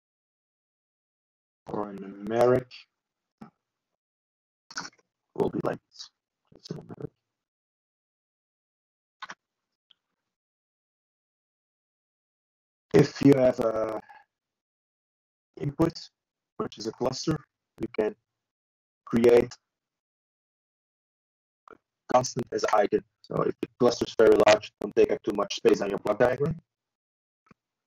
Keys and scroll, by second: 23.6 ctrl+e.